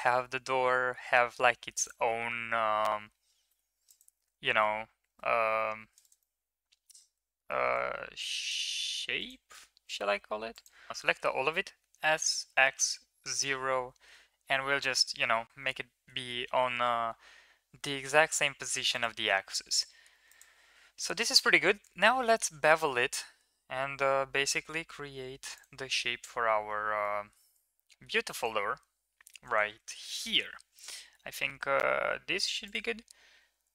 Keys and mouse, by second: 1.4 ctrl+r, 3.3 e, 4.2 ctrl+z, 4.9 ctrl+z, 5.6 ctrl+r, 6.0 right click, 7.4 ctrl+r, 10.0 e, 11.7 s, 13.9 KP_1, 16.1 g, 21.5 ctrl+b, 27.0 middle click, 27.7 middle click, 28.1 middle click, 29.1 3, 29.7 shift+middle click, 30.0 middle click.